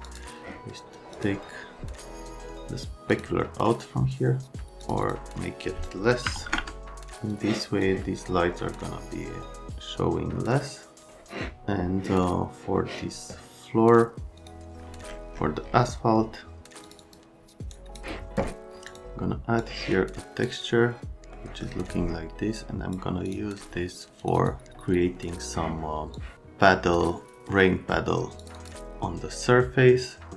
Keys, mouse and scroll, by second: 0.0 click, 1.1 click, 3.1 click, 4.8 click, 5.0 click, 6.3 KP_Decimal, 6.4 KP_2, 6.5 KP_Enter, 7.3 click, 14.4 middle click, 16.8 middle click, 17.0 middle click, 17.7 middle click, 18.9 middle click, 26.1 click, 28.4 click, 28.6 click.